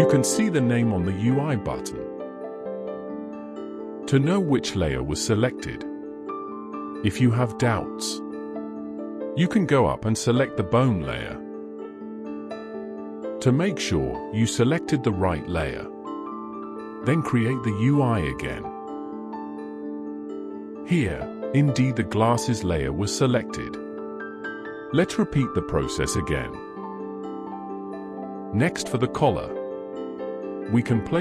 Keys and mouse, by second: 11.9 ctrl+z, 12.9 ctrl+z, 17.9 click, 25.7 click, 26.4 click.